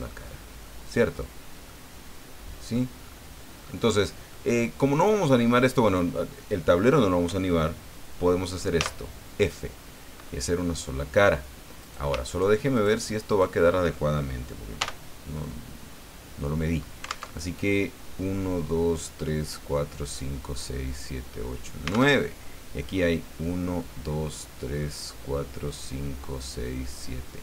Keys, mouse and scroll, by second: 0.6-1.3 scroll down 4, 1.7-2.9 middle drag, 3.6-3.9 scroll up 2, 4.3-6.1 middle drag, 8.8 f, 11.8 right click, 12.3 shift+right click, 12.7 shift+right click, 13.3 shift+right click, 14.8 f, 17.3 alt+Tab, 22.1 alt+Tab.